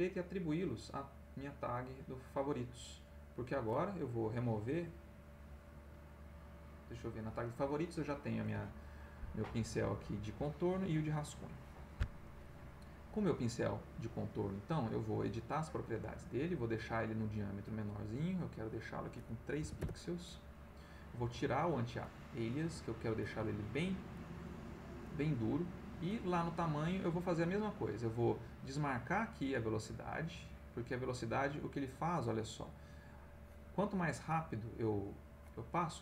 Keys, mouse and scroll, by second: 2.0 right click, 5.7 click, 6.7 click, 13.6 click, 15.1 click, 17.8 click, 18.4 right click, 19.6 3, 19.8 Return, 21.3 click, 22.0 click, 23.2 click, 24.1 click, 26.1 click, 30.0 click, 30.8 click, 33.4 click, 34.3 click, 35.4 click.